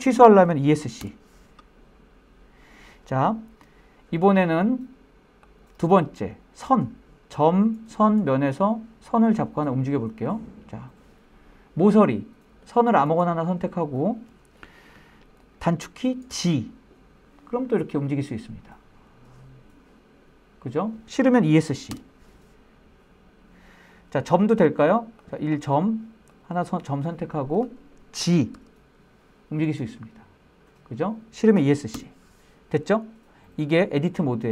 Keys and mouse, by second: 0.1 Escape, 4.6 click, 11.9-13.1 middle drag, 15.5 g, 21.1 Escape, 24.4 click, 25.5 click, 27.7 g, 31.1 Escape.